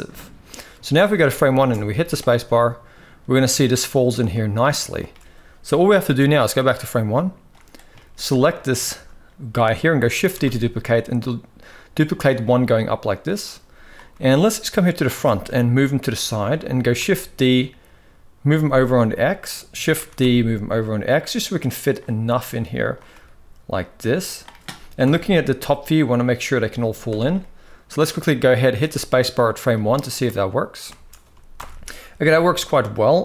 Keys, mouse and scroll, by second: 0.5 shift+middle click, 1.3 space, 1.7 z, 3.1-4.7 shift+middle drag, 5.4 space, 6.7 click, 7.7 shift+middle drag, 8.7 shift+middle click, 9.9 shift+d, 12.2 shift+middle click, 13.9 g, 15.0 shift+middle drag, 16.7 shift+d, 19.7 shift+d, 22.0-22.7 drag, 22.8 g, 24.7 KP_7, 26.2-26.6 middle drag, 26.6 z, 27.1-27.9 middle drag, 28.5 space, 29.4-31.0 middle drag, 31.0 space, 31.3 shift+Left, 32.0 KP_1, 33.1 KP_7.